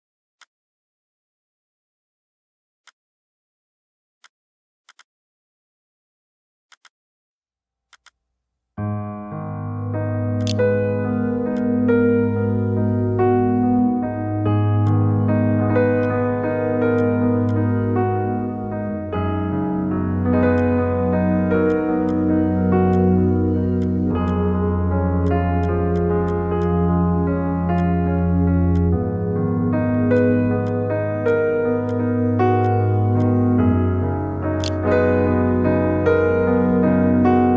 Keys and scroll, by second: 8.9-10.3 typing, 10.6 ctrl+g, 33.8-34.8 typing.